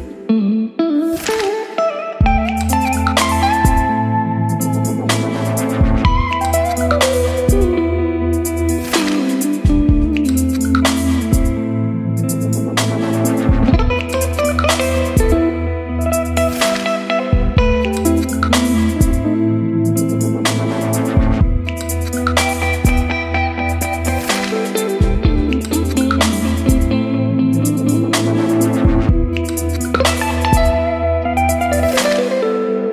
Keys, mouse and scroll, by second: 10.6 Return, 10.7-11.7 typing, 12.0 Return, 12.6 ctrl+z, 13.9 space, 14.4 shift+`, 17.6 Return, 18.2 space, 19.7 q, 20.1 s, 20.7 shift+t, 21.3 Return, 22.3-26.2 typing, 24.4 Return, 26.6 ctrl+s, 28.4-31.5 drag, 31.5 middle click, 32.1-32.9 drag.